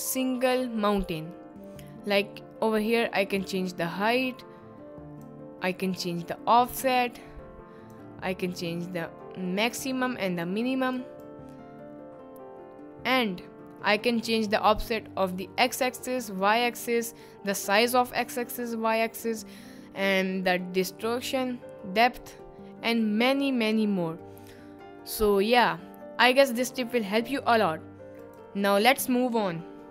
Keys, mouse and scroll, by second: 3.4-5.4 drag, 6.0-8.0 drag, 8.6-10.1 drag, 10.4-13.2 drag, 15.8 click, 28.2 click.